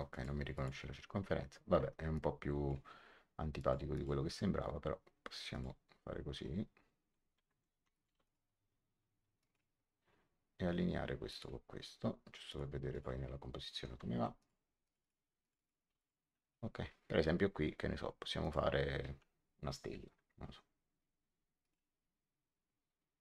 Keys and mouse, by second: 0.0 click, 1.7 Escape, 2.1 click, 3.5 click, 5.4 click, 6.8 middle click, 7.4 Escape, 7.8 click, 8.0 x, 8.2 click, 9.3 click, 11.2 click, 12.4 click, 14.0 Escape, 14.3 click, 15.8 x, 15.9 click, 18.3 click, 21.5 click.